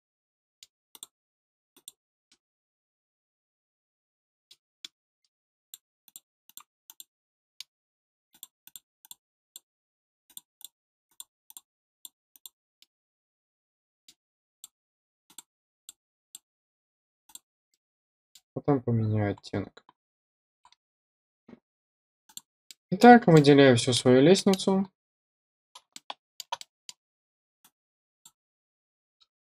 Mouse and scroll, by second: 0.1 middle click, 0.8 click, 1.7 click, 2.2-4.4 middle drag, 4.7 middle click, 5.5 click, 6.0 click, 6.4 click, 6.8 click, 7.3 middle click, 8.2 click, 8.6 click, 8.9 click, 9.4 click, 10.2 click, 10.5 click, 11.4 click, 11.9 click, 12.2 click, 12.7-14.0 middle drag, 14.5 click, 15.2 click, 15.7 click, 16.2 click, 17.2 click, 17.6 middle click, 18.3 scroll down 1, 19.3-19.6 scroll up 2, 20.3 scroll up 1, 20.6-21.1 scroll down 2, 22.2 click, 22.6-22.9 middle drag, 23.0-23.3 scroll down 1, 23.3-23.9 middle drag, 23.9-24.3 scroll down 1, 24.3 middle click, 24.7-26.5 scroll down 1, 26.5 middle drag, 27.5-28.2 drag.